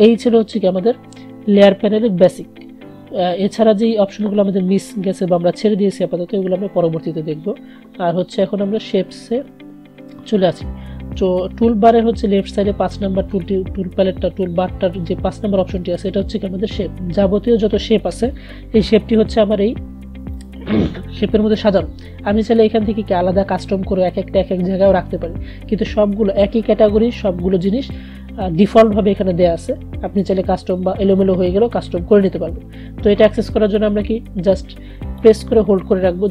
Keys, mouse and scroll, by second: 35.3-36.3 drag.